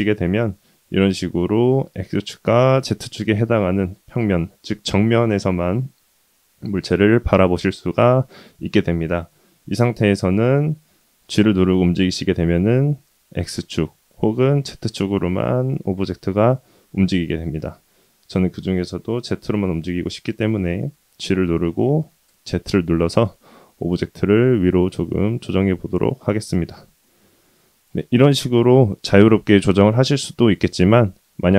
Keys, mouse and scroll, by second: 10.6 g, 21.1 g, 30.6 ctrl+z.